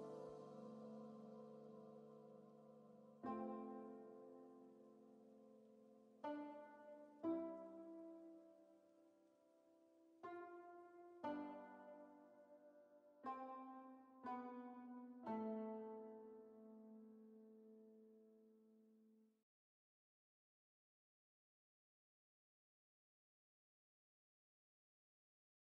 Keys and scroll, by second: 3.3 ctrl+z, 5.4 x.